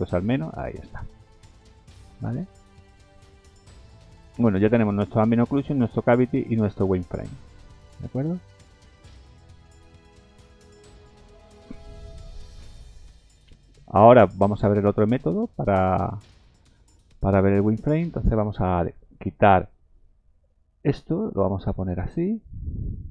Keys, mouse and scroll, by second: 1.9-2.3 scroll up 2, 3.1 shift+middle click, 6.4 scroll down 1, 7.1 scroll down 4, 8.3 click, 8.8-9.8 scroll down 7, 10.1 shift+middle click, 10.1 scroll down 1, 18.1-19.2 scroll up 11, 19.1 shift+middle click, 22.3 click.